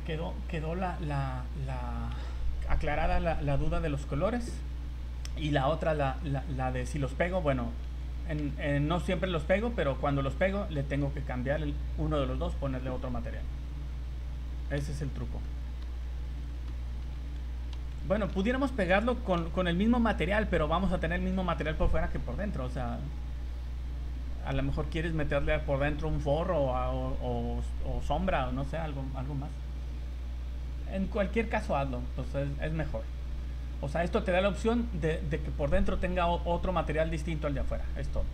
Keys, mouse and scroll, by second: 6.4-6.7 scroll down 3, 7.2 scroll up 1, 7.8 z, 8.4 Tab, 9.1 z, 10.4 click, 13.9 scroll down 2, 14.2 scroll up 2, 14.8 v, 16.3 v, 17.2 z, 17.3 z, 17.8 z, 18.9 middle click, 19.4 z, 22.9 scroll down 2, 23.5 scroll up 1, 31.2 scroll down 1, 32.3 middle click, 33.6 scroll up 1.